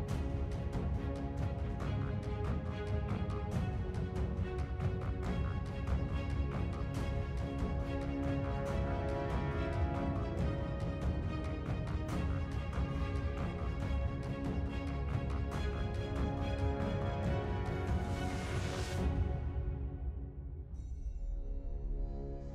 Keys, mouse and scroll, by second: 5.6 double click.